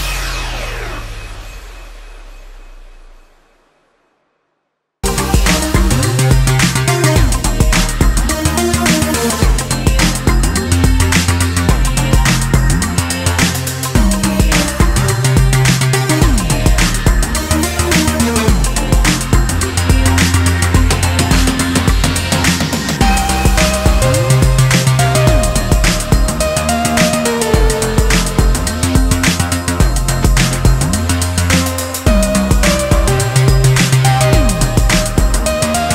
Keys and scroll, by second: 2.6 9, 4.0 0, 21.6 BackSpace, 28.4 ctrl+d, 34.2 d.